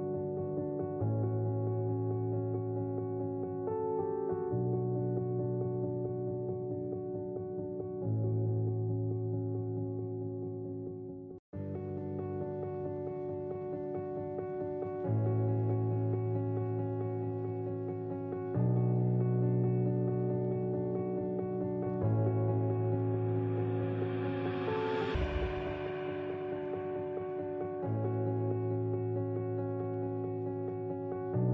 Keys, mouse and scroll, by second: 1.0 right click, 2.1 click, 3.0 ctrl+r, 6.2 ctrl+b, 9.6 click, 10.2 ctrl+r, 11.1 right click, 11.6 click, 12.9 click, 13.7-15.2 drag, 17.1 click, 18.4 click, 19.0 click, 20.6 click, 21.5 click, 22.4 click, 23.1 click, 24.3 click, 24.9 click, 25.6 click, 26.3 click, 27.5 click, 28.1 click, 28.9 click, 29.6 click, 31.4 click.